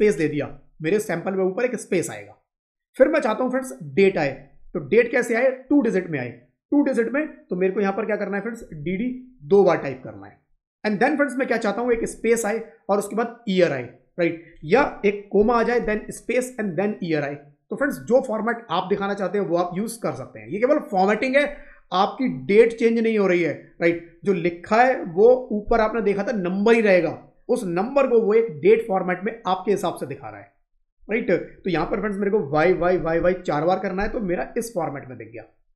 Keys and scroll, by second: 11.8 space, 15.7 space.